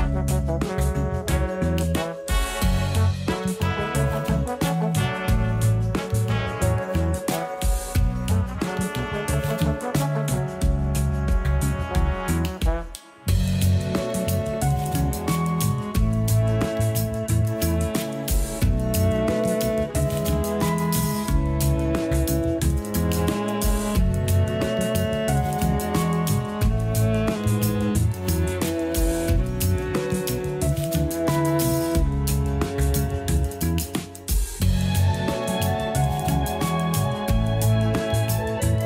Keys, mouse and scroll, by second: 0.9-7.1 drag, 8.5 a, 8.7 a, 9.3 Tab, 9.7 a, 9.9 a, 12.5 click, 13.2 click, 15.8 click, 17.5-18.2 drag, 18.2 a, 18.5 a, 23.2 click, 29.5-30.9 drag, 30.9-34.0 middle drag, 34.7-37.8 middle drag.